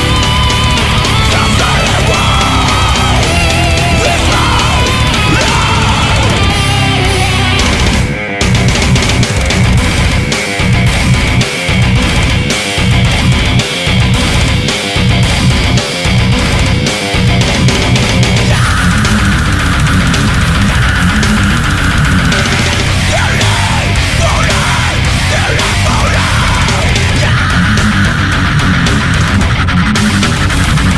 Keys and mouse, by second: 4.4 right click, 5.5 right click, 5.9 right click, 7.7 right click, 8.5 ctrl+z, 9.6 right click, 10.0 ctrl+z, 11.2 right click, 11.9 right click, 12.6 right click, 13.4 right click, 14.0 right click, 14.4 right click, 28.5 right click, 28.8 right click.